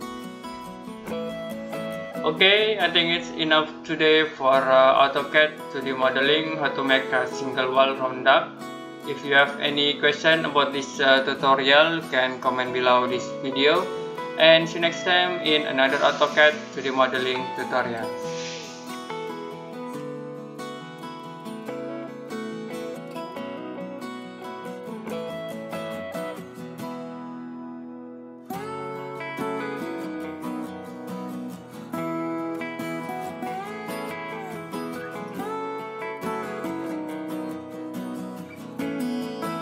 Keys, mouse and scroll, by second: 0.4 Escape, 0.8 middle click, 19.6 click.